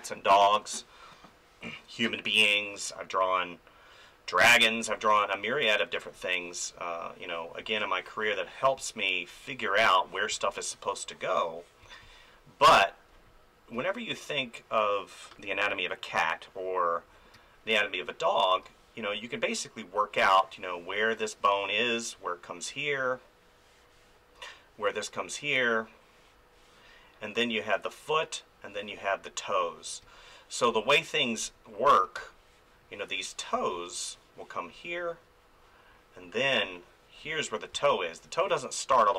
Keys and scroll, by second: 4.9 space, 8.8 space, 17.3 space, 19.1 space, 30.0 ctrl+z, 30.7 space, 33.5 space, 37.7 space, 39.1 ctrl+z.